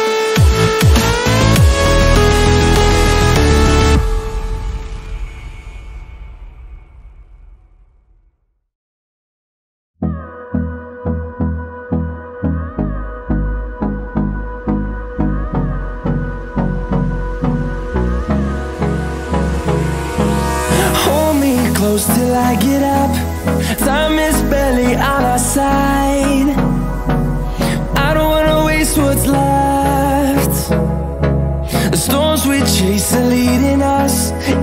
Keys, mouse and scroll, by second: 1.8-2.2 scroll up 1, 2.4 alt+click, 5.8-6.4 alt+scroll down 3, 7.7-8.2 scroll up 2, 9.3 click, 12.1 click, 12.5-13.1 alt+scroll down 2, 13.1 scroll up 1, 14.0 alt+scroll up 1, 14.6 scroll down 1, 15.3 scroll up 1, 16.2 click, 21.1 click, 22.3-23.5 scroll down 1, 24.0-27.3 drag, 28.2-28.8 scroll up 1, 28.8-33.1 drag, 33.1 scroll down 1, 33.6 click, 34.4-34.6 scroll down 1.